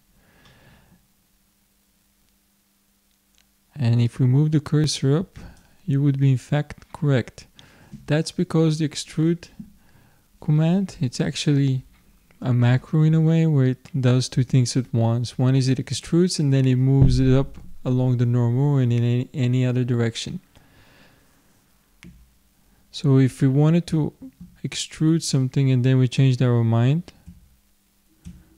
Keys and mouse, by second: 4.1-6.0 drag, 22.9-27.3 middle drag, 27.3 ctrl+z, 28.3 ctrl+z.